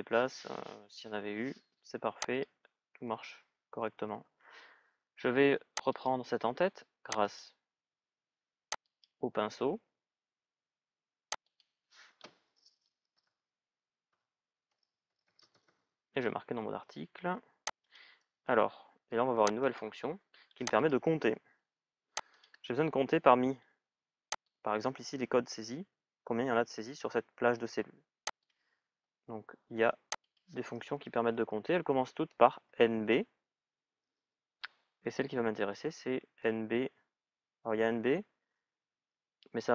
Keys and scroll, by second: 12.9 shift+n, 13.9 shift+b.